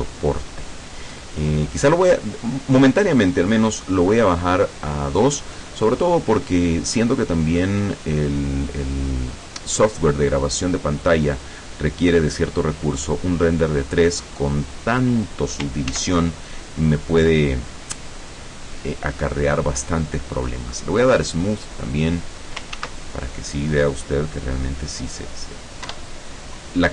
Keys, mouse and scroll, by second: 3.8 click, 16.0 ctrl+s, 16.3 ctrl+click, 21.6 click, 22.8 ctrl+s, 23.1 ctrl+click, 24.0-24.4 scroll up 2, 24.6 scroll down 1, 26.0 F12.